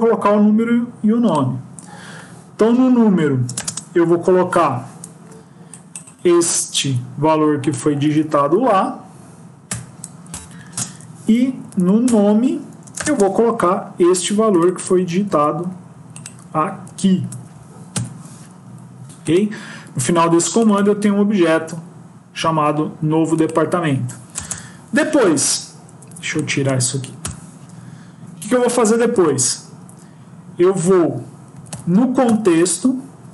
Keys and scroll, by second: 6.7 ctrl+c, 8.0 ctrl+v, 10.6 ctrl+space, 11.5 Down, 11.6 Down, 12.0 Return, 15.1 ctrl+c, 16.8 ctrl+v, 27.1 BackSpace.